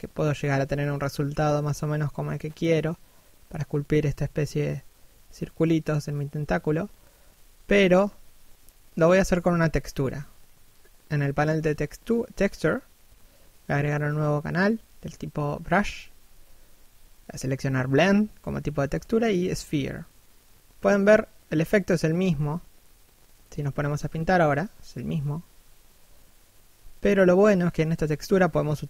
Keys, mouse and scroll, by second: 0.0 f, 0.9 right click, 1.1 click, 2.4 middle click, 4.3 1, 23.7 right click.